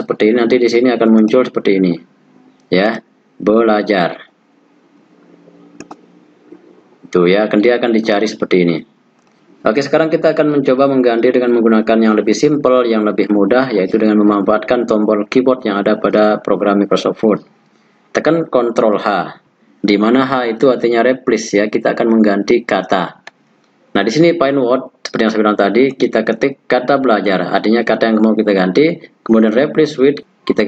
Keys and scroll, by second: 18.7 ctrl+h.